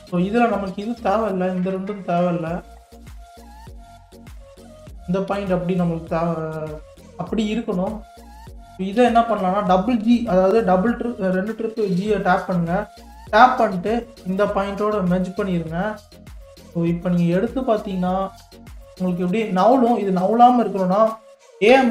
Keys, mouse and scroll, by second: 1.3 shift+click, 1.8-3.7 middle drag, 3.7 shift+click, 4.2-5.3 middle drag, 5.3 KP_3, 6.4 scroll up 1, 7.0-9.0 shift+middle drag, 9.0 g, 16.4-18.4 scroll up 1, 18.4 g, 20.6 scroll down 5, 21.7 a.